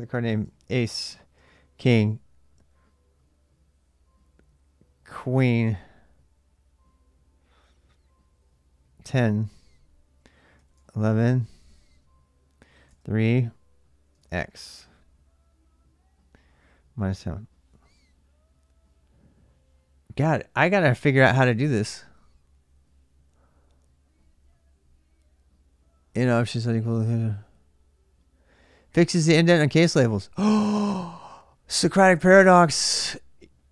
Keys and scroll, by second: 0.2-1.6 typing, 0.5 Return, 1.6 Return, 5.2-5.6 typing, 5.4 Return, 8.7-9.0 typing, 10.3 typing, 12.4-14.1 typing.